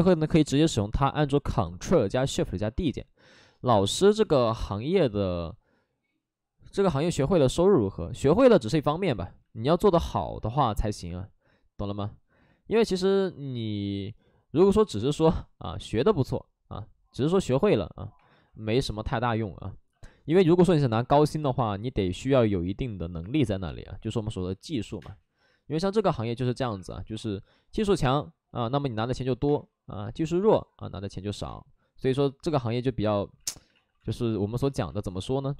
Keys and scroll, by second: 3.9 ctrl+z, 4.2 x, 9.2 ctrl+z, 23.2 2, 24.8 2, 24.9 space, 26.5 3, 26.7 3, 29.4 space, 31.4 space, 33.3 ctrl+z, 33.5 ctrl+z, 33.7 ctrl+z, 33.9 x.